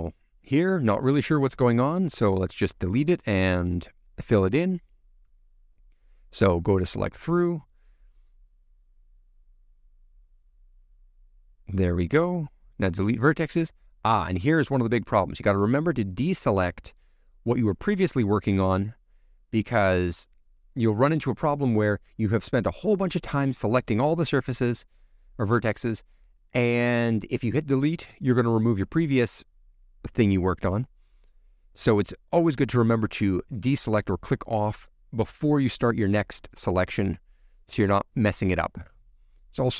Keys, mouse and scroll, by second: 0.4-0.7 scroll up 5, 0.7-2.5 middle drag, 2.5-2.8 scroll up 2, 2.8 middle click, 3.3 scroll down 2, 3.6-6.8 middle drag, 6.8-8.6 drag, 8.6 c, 13.1 x, 13.3-13.9 scroll down 5, 14.3 ctrl+z, 15.1 click, 15.4-16.3 scroll up 4, 17.0 c, 20.7 x, 21.0-22.0 middle drag, 22.0 click, 22.3 scroll down 2, 22.5 middle click, 23.1 click, 24.2 click, 24.3 middle click, 25.8 click, 26.2 shift+click, 26.6 x, 26.7 middle click, 27.4 click, 27.8 x, 27.9 middle click, 28.4 click, 29.3 shift+click, 29.4 shift+click, 29.6 shift+click, 29.9 shift+click, 30.0 shift+click, 30.6 click, 30.7 middle click, 31.5 click, 32.3 alt+shift+click, 32.4 shift+middle click, 33.1 click, 33.8 middle click, 34.6 middle click, 35.4 click, 36.2 shift+middle click, 36.4 scroll up 2, 36.5 middle click, 37.4 shift+middle click, 38.1 middle click, 39.0 click, 39.1 scroll down 6, 39.3 middle click.